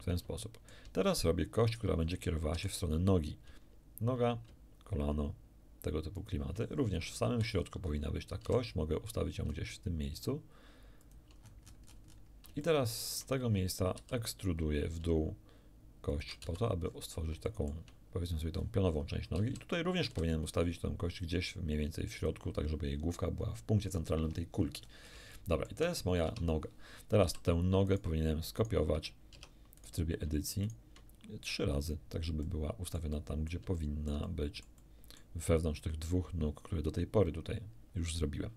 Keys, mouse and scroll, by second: 0.4 shift+middle click, 1.1 shift+scroll up 2, 1.7 right click, 2.5 e, 6.2 ctrl+shift+click, 6.7-8.1 ctrl+shift+scroll up 5, 7.2 ctrl+shift+z, 8.4 g, 11.0 shift+click, 11.5-12.3 shift+scroll down 4, 12.6 shift+middle click, 14.0 e, 16.1 shift+click, 16.4 shift+z, 16.8-17.4 shift+scroll up 3, 17.4 shift+middle click, 18.6-19.2 shift+scroll up 4, 19.4 z, 20.1 g, 22.2 click, 23.3-25.2 scroll down 6, 25.3 shift+middle click, 25.6 shift+click, 26.2 shift+Tab, 27.3 z, 27.9 click, 28.6 click, 29.3 Tab, 29.8 click, 30.6 shift+click, 32.4-33.7 middle drag, 33.8-35.4 shift+middle drag.